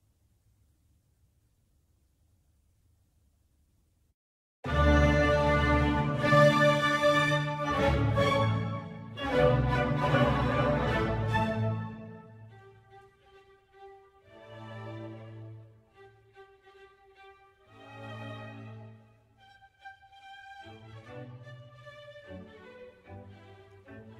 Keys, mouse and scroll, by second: 2.3-3.8 scroll up 1, 3.8-5.9 scroll up 1, 5.9-7.8 scroll up 1, 7.8-9.3 scroll up 1, 9.3-9.8 scroll up 1, 9.8-14.6 scroll up 1, 14.6-15.7 scroll up 1, 15.7-16.5 scroll up 2, 16.5-20.5 drag, 20.5-22.6 scroll down 2, 22.6-24.1 drag.